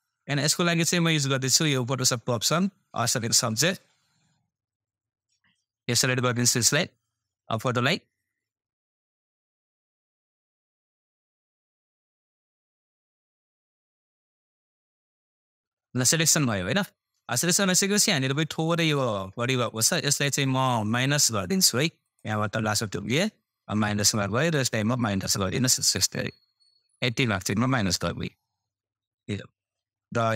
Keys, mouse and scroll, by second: 2.7 click, 19.6-23.6 scroll down 1.